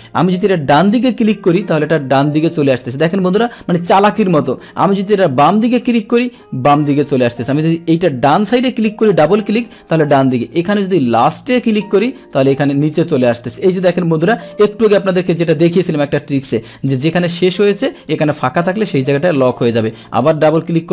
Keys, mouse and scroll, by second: 0.7 click, 1.7 click, 5.4 click, 5.6 click, 8.2 click, 8.3 click, 11.2 click, 11.4 click, 18.0 click, 19.4 click, 19.6 click.